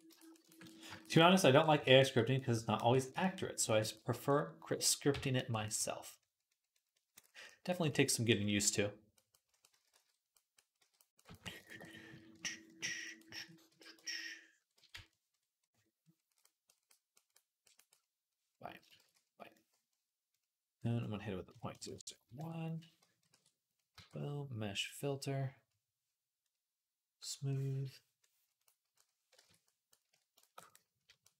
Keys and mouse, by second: 4.9 j, 7.7 d, 9.6 ctrl+z, 9.7 ctrl+z, 10.6 d, 11.9 d, 13.2 ctrl+z, 13.5 d, 14.6 ctrl+z, 18.8 ctrl+z, 21.6 KP_0, 23.2 ctrl+r, 23.8 q, 29.2 ctrl+Tab, 29.9 d, 30.5 middle click, 30.6-31.3 drag.